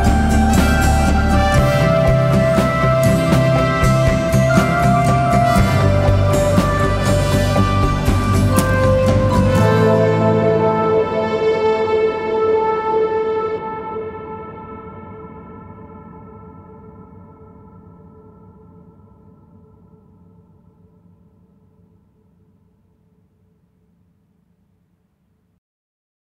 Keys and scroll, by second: 2.1 ctrl+z, 2.9 1, 5.2 shift+p, 7.1 p, 7.8 3, 9.4 ctrl+z, 11.3 ctrl+z, 12.9 ctrl+z, 14.3 ., 21.4 4, 25.2 4.